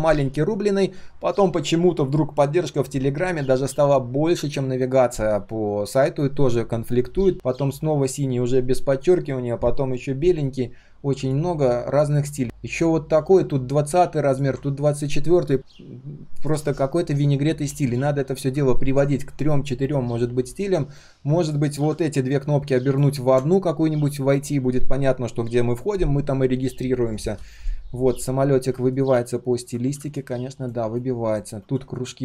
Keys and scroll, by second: 23.1 ctrl+z.